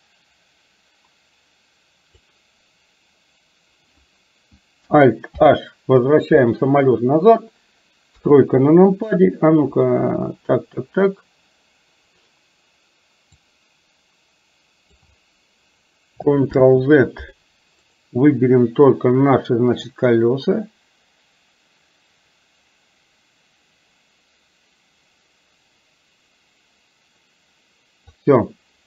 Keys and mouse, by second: 5.4 alt+h, 8.2 KP_3, 13.6 click, 13.9-15.2 drag, 16.6 ctrl+z, 18.0 click, 20.2-28.2 drag.